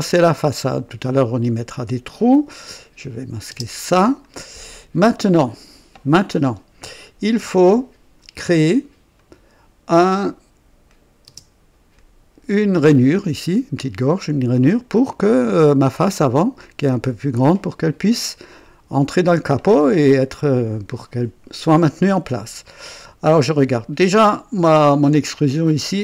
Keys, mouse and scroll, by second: 0.2 click, 1.7 click, 2.9 click, 3.5 space, 4.1-7.0 drag, 9.1 click, 10.2 click, 10.8 click, 11.0 typing, 11.9-12.8 drag, 14.9-15.7 drag, 21.7-23.5 drag, 23.7 scroll up 1, 24.2 right click, 25.5 click.